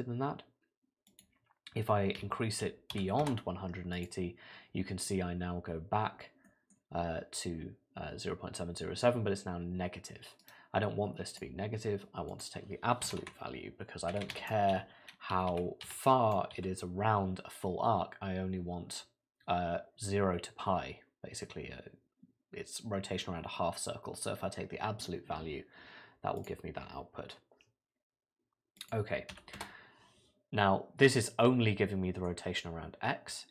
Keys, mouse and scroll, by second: 1.1 click, 4.0 click, 6.5 middle click, 10.4 right click, 13.2 Left, 15.5 Right, 28.8 click, 31.4 middle click.